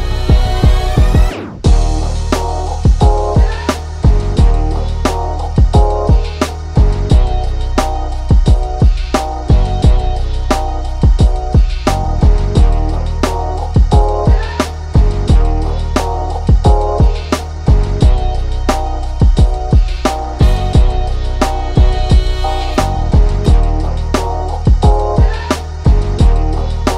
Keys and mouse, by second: 4.1 click, 5.3 click, 6.1 ctrl+0, 6.4 right click, 6.7 click, 7.0 right click, 7.4 click, 7.7 right click, 8.1 click, 8.5 right click, 8.9 click, 9.7 click, 9.9 ctrl+c, 10.1 click, 10.5 ctrl+v, 10.9-13.1 drag, 13.8 click, 14.3 ctrl+c, 14.7 click, 14.9 ctrl+v, 15.3-16.6 drag, 16.6 click, 18.1 click, 19.2 ctrl+v, 19.5 click, 20.3 ctrl+shift+[, 20.6 ctrl+], 21.2 click, 22.8 click, 24.6 click, 26.6 click, 26.7 ctrl+c.